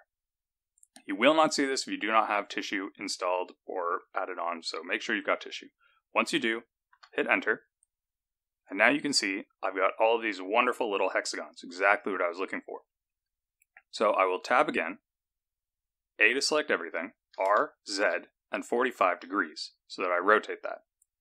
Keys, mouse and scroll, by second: 14.4 Tab, 16.2 a, 17.3 r.